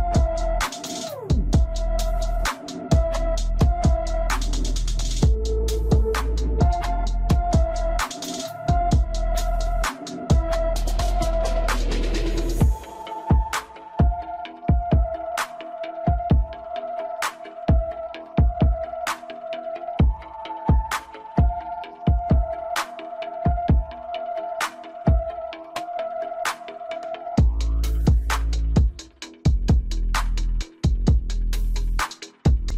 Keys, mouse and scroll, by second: 4.6-5.0 scroll down 2, 5.0-6.2 middle drag, 6.2-6.6 scroll down 2, 6.6-8.7 middle drag, 8.7-9.7 scroll up 3, 9.7-10.7 scroll up 1, 10.7-11.5 scroll down 3, 11.5-12.5 middle drag, 12.5-13.3 scroll up 2, 13.3-14.0 scroll up 1, 14.0-14.7 scroll down 3, 14.7-15.7 middle drag, 15.7 click, 16.4-16.8 scroll up 1, 17.2-17.6 scroll down 2, 18.4 s, 22.1 click, 23.2 click, 23.8-26.9 middle drag, 27.0-27.5 scroll up 1, 28.3 scroll down 2, 28.6-29.9 middle drag, 29.9-30.3 scroll down 1, 30.3 click, 30.7-31.6 middle drag, 31.6-32.1 scroll up 2, 32.1-32.7 shift+middle drag.